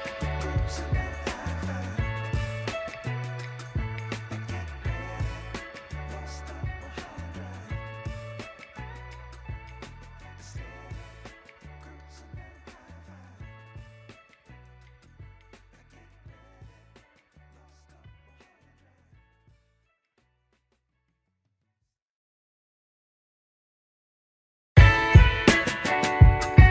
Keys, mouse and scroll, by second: 0.0-1.2 middle drag, 1.7 middle click, 2.1-3.0 scroll up 4, 3.0 middle click, 3.6 Tab, 4.1 drag, 4.3 scroll down 2, 4.8-6.2 middle drag, 6.6 middle drag, 7.6 ctrl+z, 8.2 ctrl+z, 9.2-9.9 scroll up 1, 9.9 Tab, 9.9-10.2 scroll up 2, 11.6 ctrl+a, 12.9 Tab, 13.7 click, 14.8 click, 14.8 3, 16.0 ctrl+b, 21.4 Tab, 21.6 click, 22.0-22.5 scroll down 2, 22.5 KP_1, 23.3 shift+middle drag, 25.1 click, 25.2 Tab, 25.7 Tab.